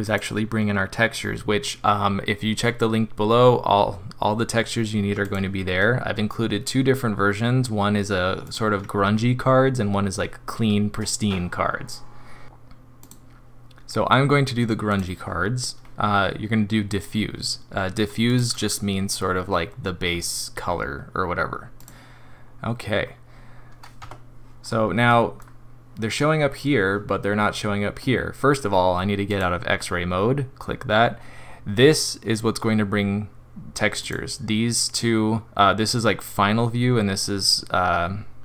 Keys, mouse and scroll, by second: 0.0 click, 18.5 click, 20.0-20.6 scroll down 3, 20.6-21.0 scroll up 4, 21.8 click, 23.0 scroll down 1, 24.0 Tab, 24.6 scroll down 3, 25.1 middle click, 25.4-26.0 scroll down 1, 29.3 click, 34.8 click.